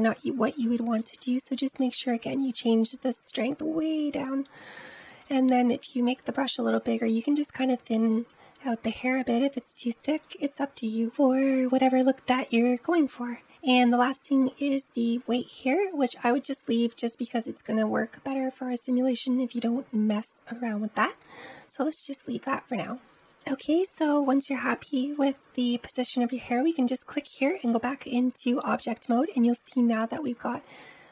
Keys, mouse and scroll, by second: 0.0 ctrl+z, 0.5 ctrl+z, 1.1 ctrl+z, 2.6-5.1 drag, 5.1 f, 7.0-11.4 drag, 11.4-12.1 ctrl+z, 12.5 ctrl+z, 14.3-17.3 drag, 22.7 click, 23.2-23.8 scroll down 2, 23.8 middle click, 24.2-24.6 scroll down 1, 24.6-26.8 shift+middle drag, 26.8-28.9 drag, 28.9-29.3 middle drag, 29.3-30.9 scroll up 2, 30.9 click.